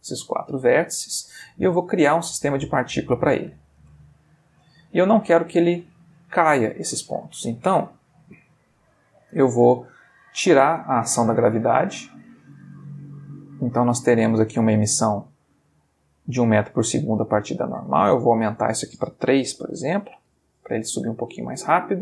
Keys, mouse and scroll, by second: 0.3 middle click, 2.7 click, 3.8 space, 4.5-5.4 middle drag, 7.0 Escape, 7.6 middle click, 8.3 middle click, 8.8 middle click, 10.9-12.2 drag, 12.6 middle click, 12.6 space, 14.1-14.7 middle drag, 15.9 middle click, 18.5 click, 19.5 3, 19.7 Return, 21.9-22.0 middle drag.